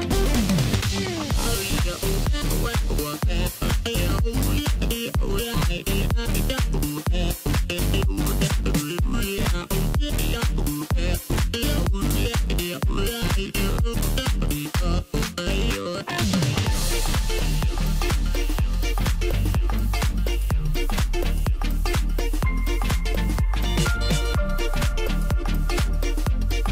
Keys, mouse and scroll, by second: 0.0 ctrl+b, 3.4-5.7 drag, 5.7 s, 7.4 click, 8.1 s, 10.4-10.9 scroll down 2, 10.9-11.3 scroll up 2, 11.3 s, 12.4 Tab, 12.7 scroll down 2, 13.0-13.4 middle drag, 13.4 right click, 14.6 KP_1, 15.2-15.6 scroll up 1, 15.6 s, 17.1 scroll down 2, 17.3-18.9 middle drag, 18.9 KP_Divide, 19.7 KP_1, 20.4-21.5 scroll up 4, 21.5 g, 23.9 scroll down 1, 24.0-26.0 middle drag, 26.0 KP_7.